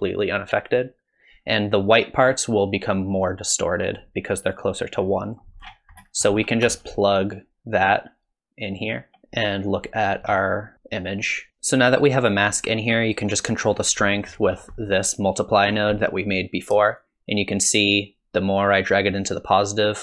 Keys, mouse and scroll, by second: 2.4 click, 5.0 click, 5.6-6.4 scroll down 26, 6.0 middle click, 6.4-7.8 scroll up 9, 7.8 click, 9.2 middle click, 10.1 ctrl+shift+click, 13.7-15.6 scroll up 7, 14.1 middle click, 14.8 middle click, 15.7-16.7 scroll down 4, 16.0 middle click, 17.0 shift+click.